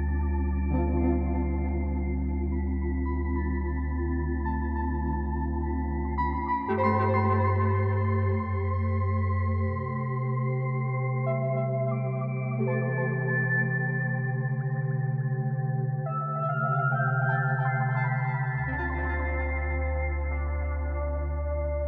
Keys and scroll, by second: 1.6 z, 2.7 z, 2.7 ctrl+alt+1, 2.9 ctrl+alt+1.